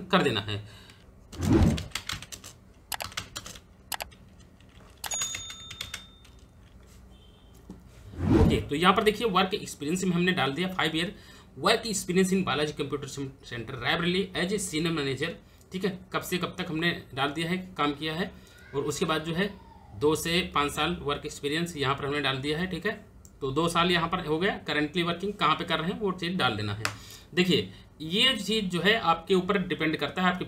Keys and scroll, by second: 0.7-3.5 typing, 4.7 shift+s, 5.3 n, 5.5 space, 5.9 shift+c.